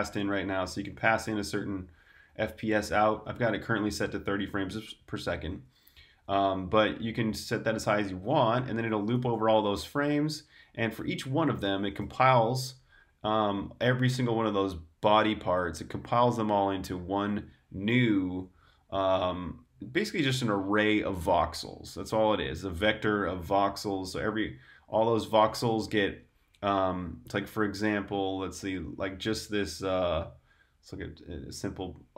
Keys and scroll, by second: 0.0-1.3 typing, 4.2-6.0 typing, 7.1 j, 7.3 j, 7.7 j, 8.8-9.9 typing, 10.1 Escape, 11.9 shift+v, 24.6 Escape, 25.3 super+Tab.